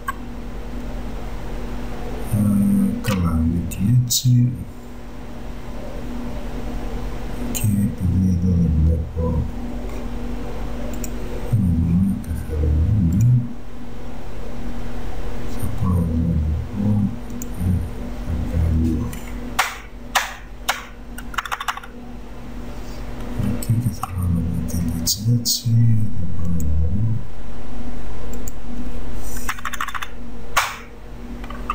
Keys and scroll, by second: 19.8 BackSpace, 24.2 -, 29.7 BackSpace.